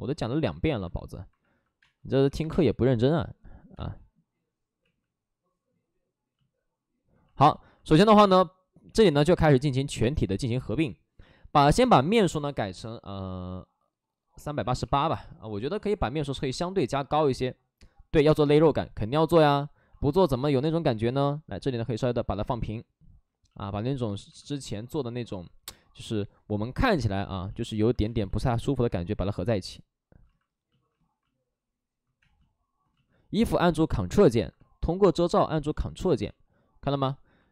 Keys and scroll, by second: 0.1 ctrl+z, 1.7 space, 2.0 3, 2.3 3, 2.4 space, 4.7 ctrl+z, 8.7 ctrl+z, 8.7 shift+f, 14.2-15.2 typing, 20.8 space, 28.0 space, 32.1 space, 36.1 ctrl+z, 37.1 alt+s.